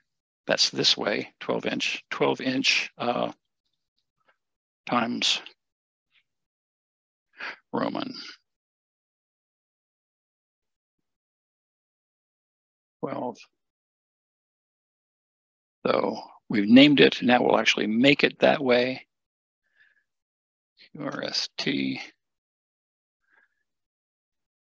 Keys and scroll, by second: 3.2 space, 5.4-6.2 typing, 12.8 1.